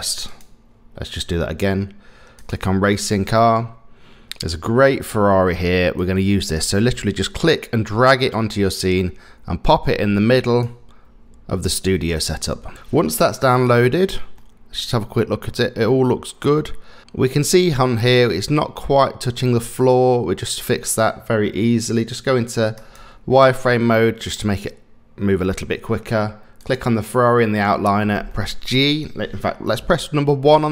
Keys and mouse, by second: 0.3 click, 2.4 click, 14.4-20.9 middle drag, 24.4-25.9 middle drag, 26.6 click, 28.3 middle click, 30.5 KP_1.